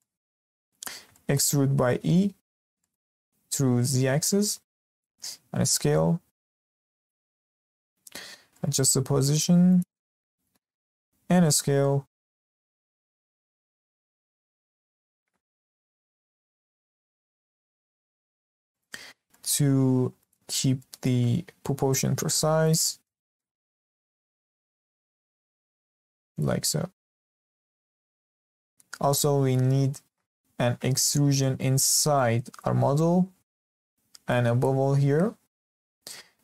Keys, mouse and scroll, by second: 0.9 scroll up 1, 1.1-1.9 shift+middle drag, 1.9 e, 5.3 s, 7.4 Tab, 8.3 g, 10.0 scroll up 2, 10.3-11.1 shift+middle drag, 11.1 Tab, 12.2 s, 14.0 click, 14.7 s, 16.8 click, 17.8 s, 19.0 g, 20.7-21.7 shift+middle drag, 21.7 s, 23.2 shift+scroll up 1, 23.3 shift+middle click, 23.8 click, 24.0 click, 24.7 s, 26.6 scroll down 2, 26.9 Tab, 27.5-28.5 scroll up 2, 28.5-36.0 middle drag.